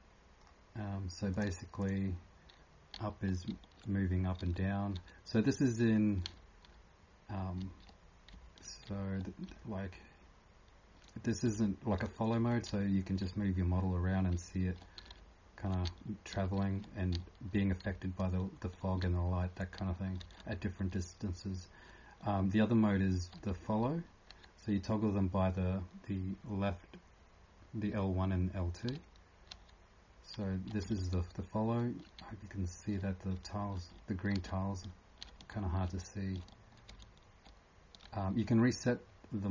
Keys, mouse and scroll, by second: 1.3 click, 3.0 e, 3.5 d, 4.4 s, 4.9 2, 6.2 r, 7.6 e, 9.5-10.2 typing, 12.0-16.8 typing, 19.5-33.9 typing.